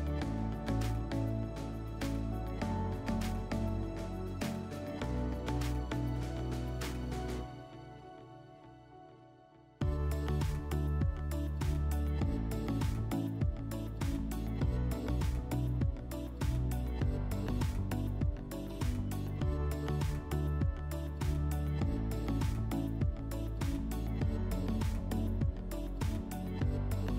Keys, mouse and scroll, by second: 0.4 click, 1.2 click, 2.8 click, 7.8 click, 9.0 click, 9.1 click, 10.1-10.4 typing, 15.2 click, 17.3 click, 18.1 click, 19.9 click, 25.4 click.